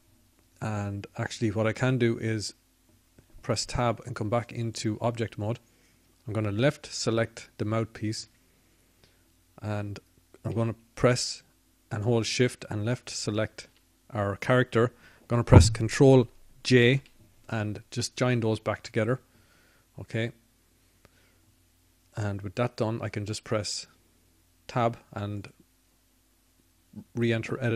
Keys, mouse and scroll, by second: 4.8-9.4 middle drag, 9.4 Tab, 22.7 ctrl+j.